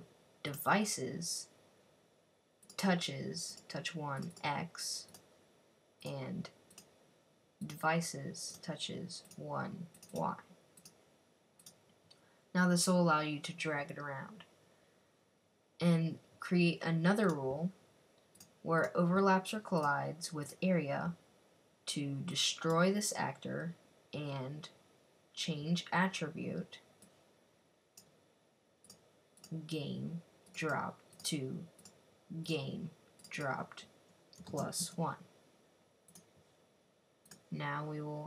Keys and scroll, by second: 34.3-34.6 typing.